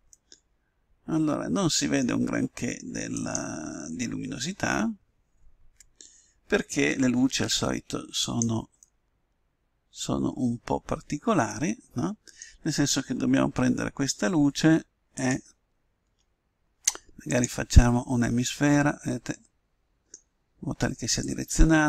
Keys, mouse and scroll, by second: 0.1-1.8 middle drag, 3.1-4.9 right drag, 7.3 Tab, 8.2 right click, 8.8-9.9 drag, 8.8-10.5 middle drag, 15.1-16.7 drag, 17.3-18.9 drag, 18.3 middle click, 18.9-21.2 middle drag, 21.2-21.8 drag.